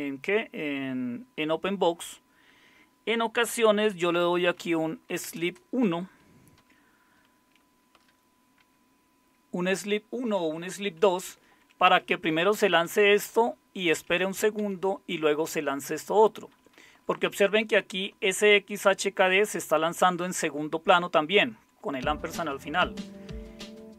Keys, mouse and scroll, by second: 3.7-5.6 typing, 7.9-8.6 typing, 11.6 Up, 11.8 Up, 12.9 Down, 13.1 Down, 13.3 Down, 13.9 Up, 14.6 Down, 16.6 Up, 16.7 Up, 18.1 Right, 18.7 Right, 23.1 typing.